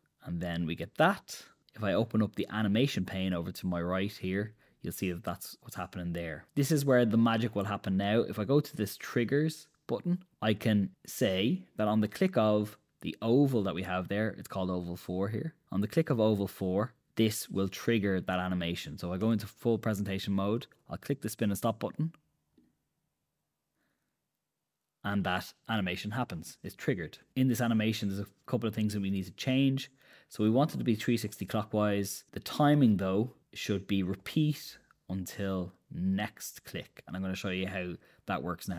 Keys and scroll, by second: 19.5 super+Return, 26.5 Escape.